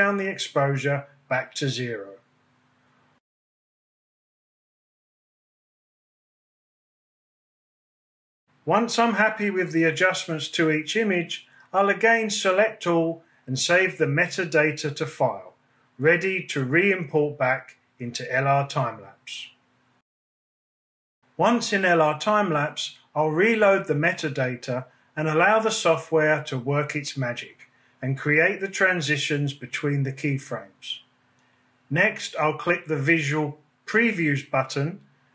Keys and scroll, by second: 4.0 Down, 4.6 Down, 7.2 Right, 9.9 g, 11.6 super+a, 16.0 super+s, 18.6 super+Tab.